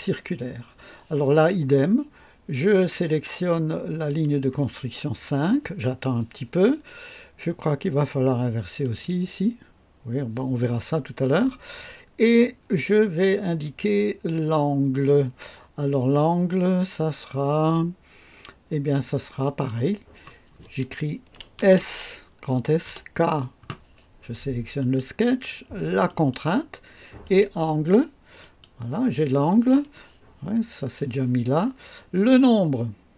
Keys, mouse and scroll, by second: 2.6 click, 4.2 click, 8.8 click, 19.4 click, 21.6-22.8 typing, 24.8 click, 26.0 click, 27.2 click, 28.4 click.